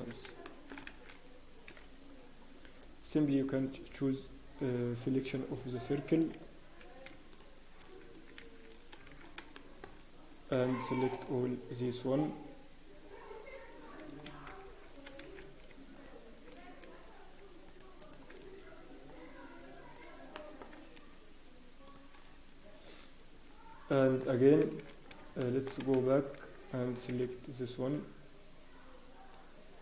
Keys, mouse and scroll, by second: 0.4 shift+middle click, 0.9 shift+z, 3.4 c, 7.4 shift+middle click, 8.0 shift+click, 8.0 scroll down 1, 8.4 shift+z, 8.7 scroll down 3, 9.1 shift+z, 9.2 scroll down 1, 9.5 shift+middle click, 9.8 scroll down 1, 13.4 c, 14.4-14.8 scroll down 3, 14.6 shift+z, 14.8-15.7 shift+scroll up 5, 15.2 shift+z, 15.9-16.4 shift+scroll up 1, 16.6 shift+click, 16.6 scroll up 1, 18.2 shift+click, 18.4-18.8 scroll down 1, 18.8-19.6 scroll up 6, 19.9 shift+click, 20.3 shift+middle click, 20.3-20.7 scroll down 5, 20.7 scroll up 1, 21.8 shift+click, 22.2-22.6 scroll down 1, 23.9 shift+middle click, 24.2 scroll down 7, 24.6 shift+z, 25.4 shift+middle click, 25.4-26.1 scroll up 6, 25.9 shift+w, 26.0 shift+z, 27.1 c.